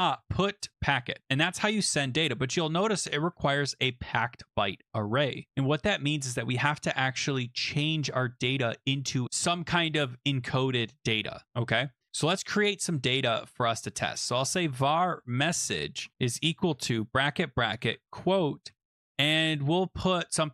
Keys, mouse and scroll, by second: 0.0-0.7 typing, 0.7 Tab, 5.9 click, 6.2 click, 6.9 Return, 12.6-19.3 typing.